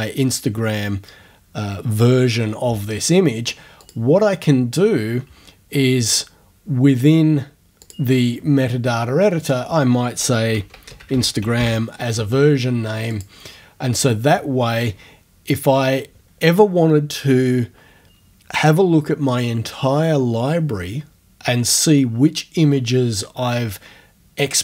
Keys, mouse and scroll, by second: 3.8 click, 5.8 scroll up 1, 7.8 click, 9.4 click, 10.2-12.1 typing, 13.1 click.